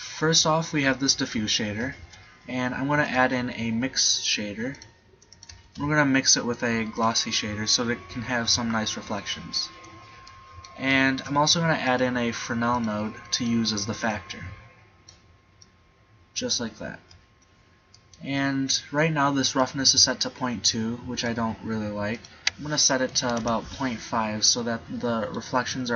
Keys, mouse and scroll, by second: 2.0 shift+a, 6.0 shift+a, 7.8-9.3 drag, 11.2 shift+a, 19.7 middle click, 24.2 middle click.